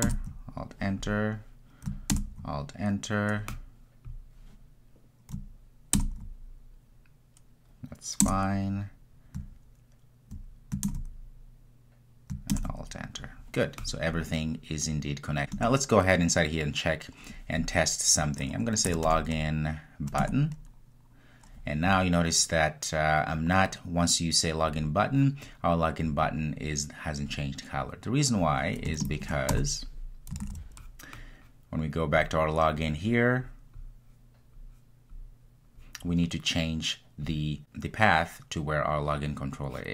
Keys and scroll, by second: 20.3 Return, 30.6 super+s.